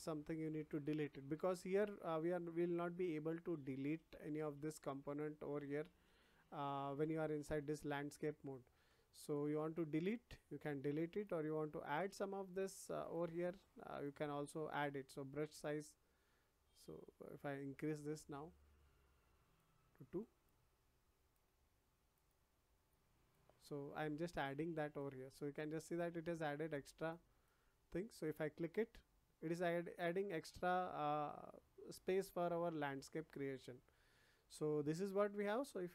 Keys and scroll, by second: 3.4 ctrl+z.